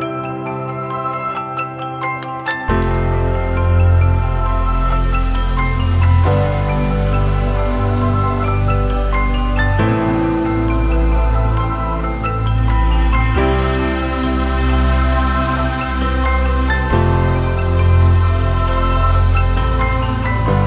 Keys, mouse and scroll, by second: 8.7 right click.